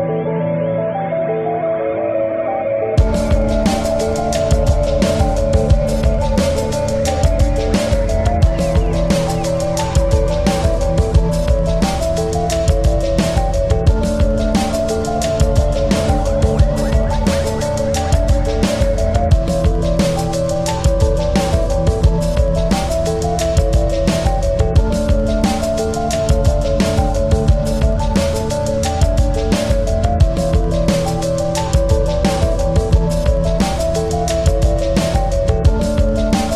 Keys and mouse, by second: 1.2 click, 3.3 ctrl+-, 4.4 ctrl+-, 4.6 ctrl+=, 5.1 ctrl+=, 5.7 space, 6.0 click, 6.2 space, 8.0 click, 8.2 right click, 8.8 click, 10.3 click, 12.1-16.6 shift+drag, 18.0 click, 19.4 click, 20.6 click, 21.7 click, 24.0 click, 24.1-27.0 drag, 27.2-28.6 drag, 28.6 ctrl+z, 29.6-31.1 drag, 30.8 typing, 31.1 ctrl+z, 31.8-34.1 drag, 34.0 typing, 34.2-36.5 drag.